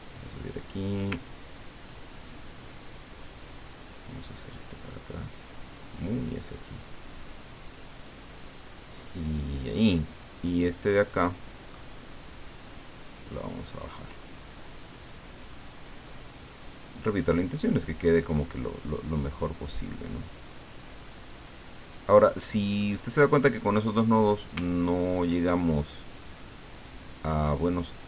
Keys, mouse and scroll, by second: 1.3-1.8 ctrl+scroll down 4, 2.1 ctrl+scroll down 2, 4.0-9.8 drag, 9.9-12.5 middle drag, 13.8-22.8 drag, 22.8 middle click, 25.8 click, 26.6 click, 27.6 click.